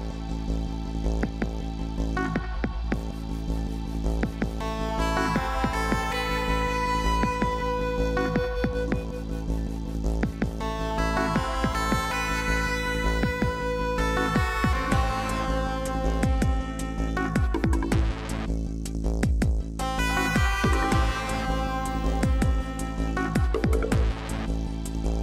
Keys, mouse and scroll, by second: 0.3 ctrl+click, 2.3 ctrl+y, 4.4 ctrl+t, 15.0 ctrl+j, 17.4 ctrl+t.